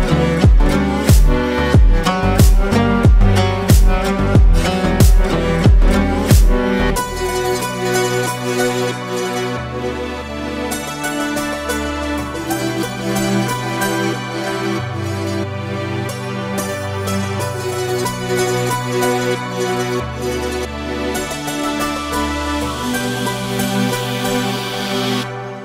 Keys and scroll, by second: 3.7 ctrl+space, 6.0 ctrl+space, 13.7 ctrl+space.